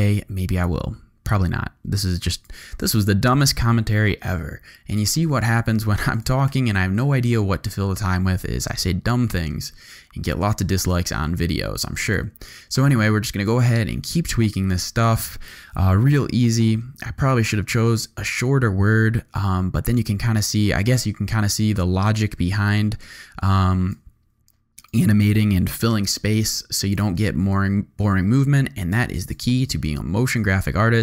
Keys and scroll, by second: 4.2 u, 6.5 u, 15.9 u, 25.7 u.